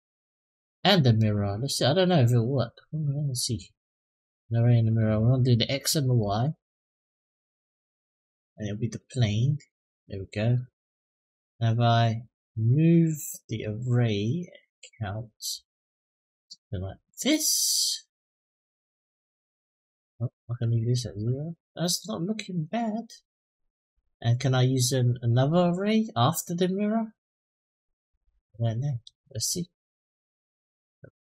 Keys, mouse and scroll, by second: 0.8 click, 1.5-3.2 drag, 4.6 click, 5.5-5.9 middle drag, 8.1 click, 13.3 click, 15.3-17.7 drag, 18.5-19.9 drag, 20.2 click, 23.6 click, 27.8 click, 29.1-30.7 drag.